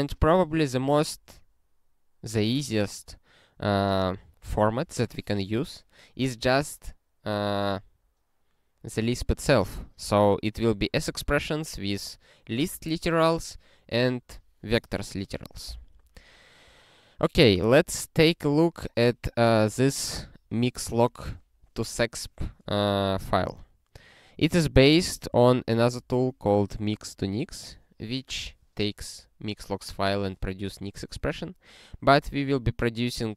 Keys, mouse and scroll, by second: 25.8 alt+<.